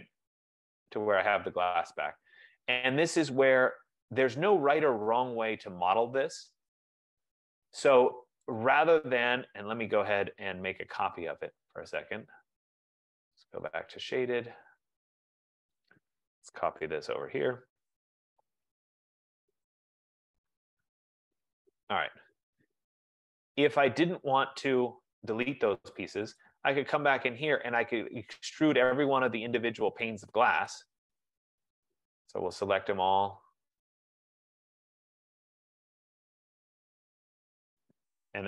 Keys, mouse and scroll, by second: 0.0 ctrl+z, 0.4 ctrl+z, 0.9 ctrl+z, 1.2 ctrl+z, 1.8 ctrl+z, 1.9 ctrl+z, 2.3 ctrl+z, 2.9 ctrl+z, 3.3 ctrl+z, 3.7 ctrl+z, 5.5-6.0 scroll, 6.1 scroll, 6.3 ctrl+z, 6.6 ctrl+z, 7.4 ctrl+z, 8.9 click, 9.8-10.4 scroll, 11.5 click, 14.0 click, 16.1 click, 17.1 typing, 18.8 click, 19.6 Return, 21.1 shift+click, 22.2 Escape, 23.6-24.3 scroll, 24.3 scroll, 24.9-25.4 scroll, 27.2 right click, 27.2 click, 27.7-28.4 scroll, 28.6-29.1 scroll, 29.1 scroll, 29.3 click, 30.3 shift+click, 30.8 click, 31.2 click, 31.9 click, 32.3 click, 32.9 click, 33.6 click, 34.5 click, 35.0 shift+click, 35.8 shift+click, 36.0 shift+click, 36.7 shift+click, 37.3 shift+click, 37.9 shift+click.